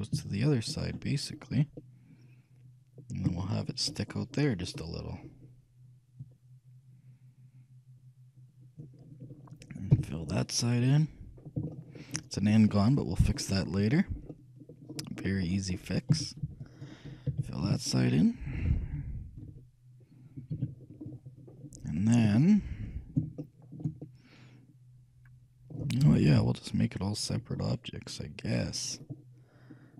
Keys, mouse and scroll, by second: 1.5-2.1 scroll up 1, 2.1-6.3 middle drag, 6.3-8.1 shift+drag, 10.1 f, 10.5-16.3 middle drag, 16.3 a, 16.6 b, 17.8 a, 17.8 f, 18.3-20.1 middle drag, 19.7 KP_3, 20.8 a, 21.2-23.2 middle drag, 23.6-26.3 middle drag, 26.5 KP_3, 27.8-29.7 middle drag.